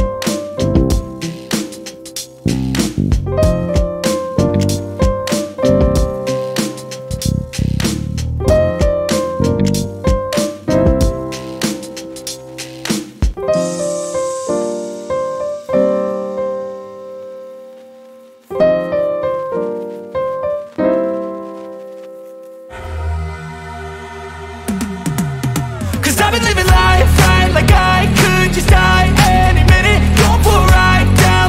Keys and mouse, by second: 2.1 click, 7.2 click, 9.8 ctrl+shift+click, 16.8 click, 17.2-20.5 typing, 21.1 click, 21.8 ctrl+shift+click, 23.7 space, 24.0 -, 24.7 space, 26.2 =, 26.8 space, 28.0 -, 29.8-31.4 typing.